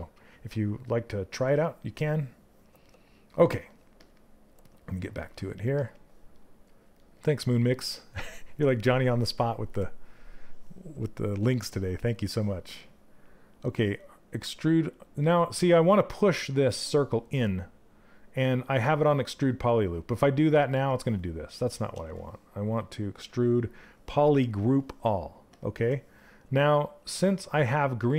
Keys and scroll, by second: 21.5 ctrl+z, 22.3 space.